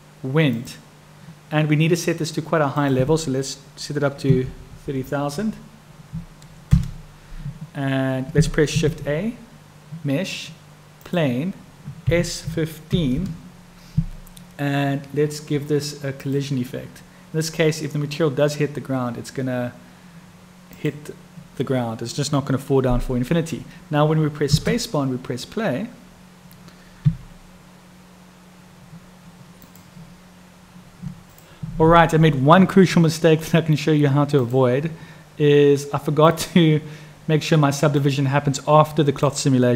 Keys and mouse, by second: 5.0-7.7 drag, 16.2 click, 24.4 space, 38.4-39.7 drag.